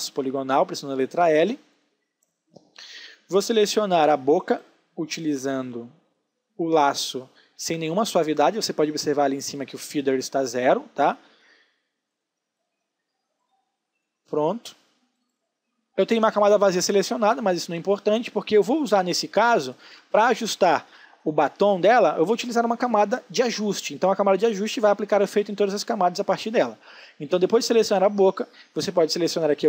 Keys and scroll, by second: 19.1 space.